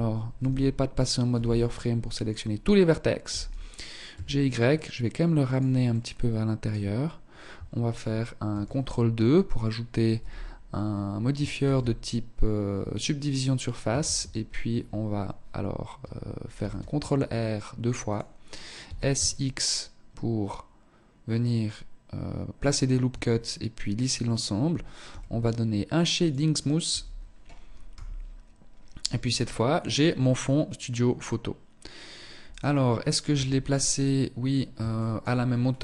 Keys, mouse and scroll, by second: 0.4 b, 1.9 scroll up 2, 2.3 g, 5.0 middle click, 7.6 ctrl+2, 9.2 z, 10.7 ctrl+e, 13.1 shift+e, 15.6 ctrl+r, 17.9 s, 22.2 Tab, 24.2 t, 25.3 click, 26.0 t, 27.0 KP_0, 27.8-28.5 scroll down 2, 28.3-29.0 scroll up 3, 29.0-29.5 scroll down 2, 29.6 scroll up 1, 30.1-30.5 scroll up 2, 31.6 right click, 32.4 KP_1, 33.4 scroll up 3, 34.0 shift+middle click, 34.5-35.3 scroll up 3.